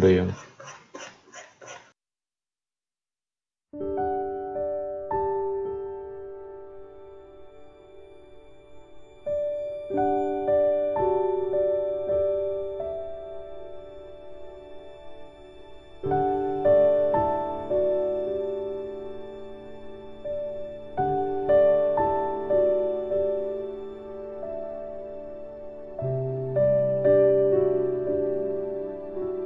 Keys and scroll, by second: 20.2 ctrl+z, 25.4 F9.